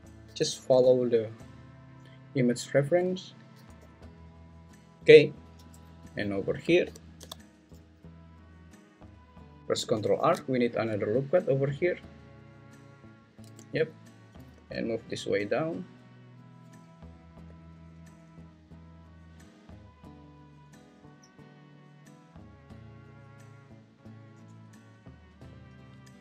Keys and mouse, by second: 0.2 g, 0.8 y, 3.5 g, 3.8 y, 6.8 g, 7.2 x, 10.2 ctrl+r, 13.5 1, 14.6 g, 17.5 g, 20.8 g, 23.0 g.